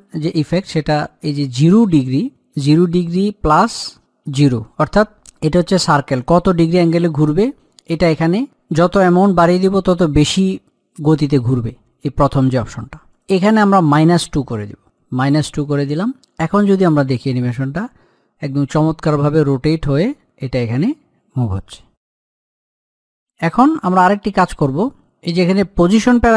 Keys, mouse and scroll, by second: 13.4 click, 17.0-24.6 drag, 24.7 click, 26.1 click.